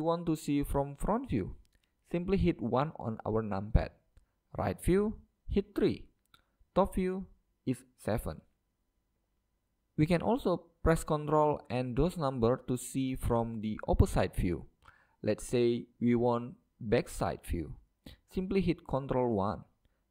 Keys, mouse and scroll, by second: 0.9-2.9 middle drag, 2.2 KP_1, 4.5 KP_3, 6.6 KP_7, 19.7 ctrl+KP_1.